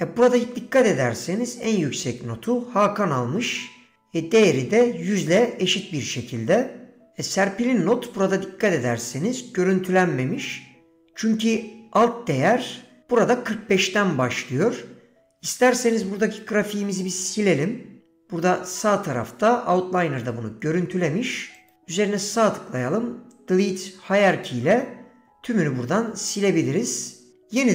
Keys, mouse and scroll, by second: 21.6-25.4 right drag.